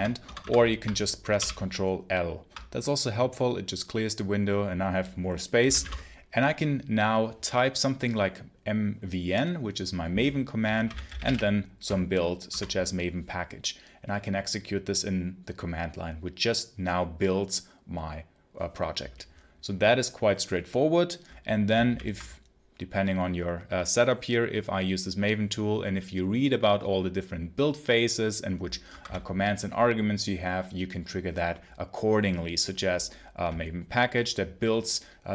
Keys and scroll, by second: 0.1 Return, 1.2 ctrl+l, 5.2-6.2 typing, 10.4-11.7 typing, 12.4 Return, 21.7 ctrl+l, 28.8 Escape, 28.9 k.